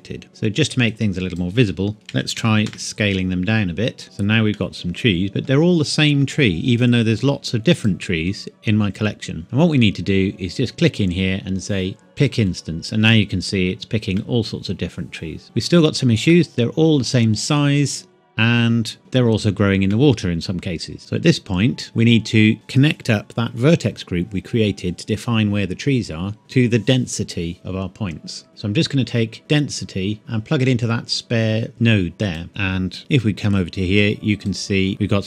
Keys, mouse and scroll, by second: 0.9 click, 2.1 KP_Decimal, 2.4 KP_1, 2.7 KP_Enter, 4.0 click, 4.5 middle click, 7.8 click, 9.7-11.8 scroll up 1, 12.2 click, 14.2 middle click, 15.4 scroll down 1, 15.6 scroll up 1, 16.3 middle click, 18.9 scroll up 1, 19.0 middle click, 21.0 click, 29.5 click, 32.5 n, 33.0 click.